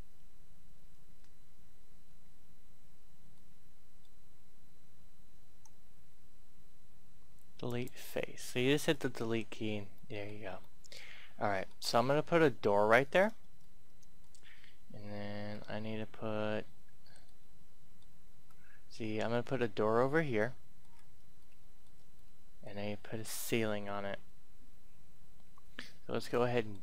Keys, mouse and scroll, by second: 3.3 middle click, 5.4 Delete, 7.5 click, 9.9-12.5 middle drag, 15.5 scroll down 1, 16.2-17.2 scroll up 1, 17.2 middle click, 17.3 scroll up 1, 18.5-20.4 scroll up 1, 20.4 middle click, 21.4 shift+middle click, 22.1 middle click, 25.9 scroll down 1, 26.1-26.8 middle drag.